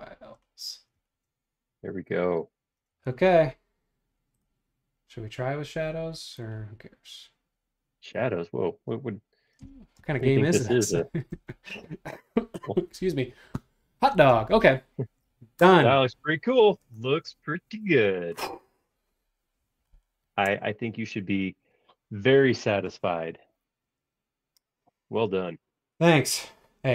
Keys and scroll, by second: 9.9 space.